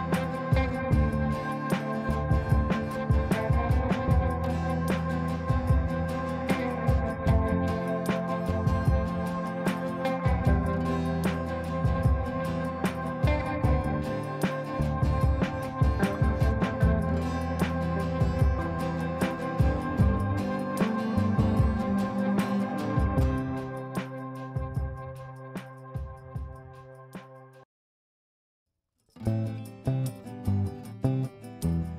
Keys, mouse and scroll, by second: 1.7 click, 1.9 F3, 2.6 F2, 2.9-3.5 drag, 5.8 ctrl+g, 6.2 shift+click, 6.5 c, 6.8 click, 9.1-12.3 shift+drag, 14.3 right click, 16.1 click, 18.2 F2, 18.5 F1, 18.9 F2, 20.4 click, 21.7 F2, 22.7 F3, 23.1-23.7 drag, 24.6-26.2 shift+drag, 27.8-29.8 drag.